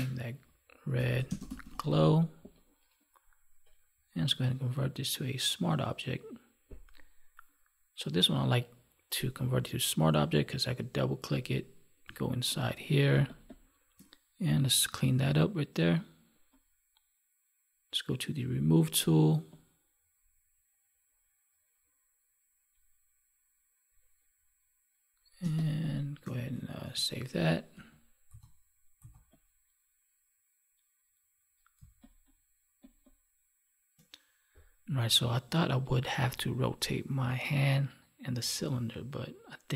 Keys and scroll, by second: 1.2 space, 13.1 space, 25.3 space, 26.7 ctrl+s, 27.7 ctrl+w, 31.7 space.